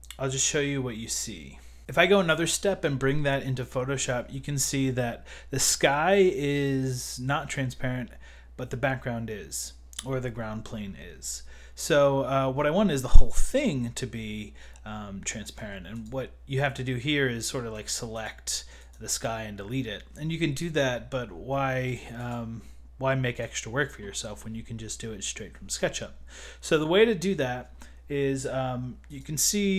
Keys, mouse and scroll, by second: 15.6 w, 15.9 click, 18.2 Escape, 18.8 click, 18.8 click, 21.9 click, 23.4 click, 24.1 click, 26.8 click, 29.2 click.